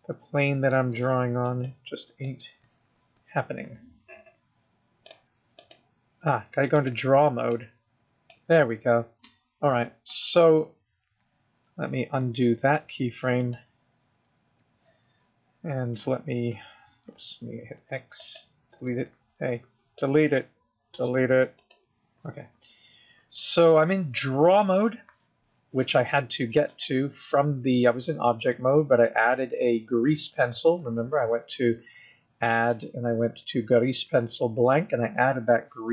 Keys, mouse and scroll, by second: 0.1 middle click, 0.6 middle click, 1.2 click, 1.9 click, 5.3 click, 5.8 click, 7.8 click, 10.3 KP_0, 13.6 click, 14.7 Delete, 18.0 x, 19.8 x, 21.2 x, 26.9 click, 32.9 click.